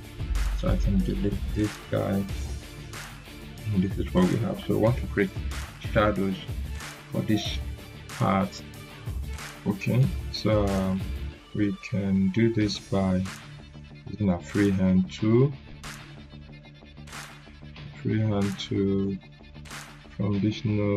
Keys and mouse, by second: 1.2 Delete, 2.0-3.0 click, 10.6-12.2 drag, 18.1 click.